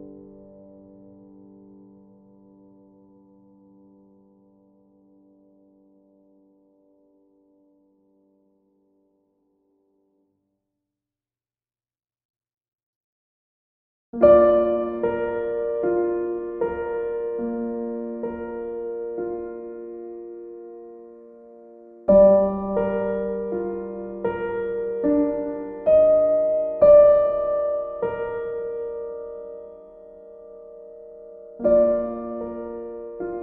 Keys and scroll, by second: 12.5 Delete, 13.9 Delete, 14.4 ctrl+d.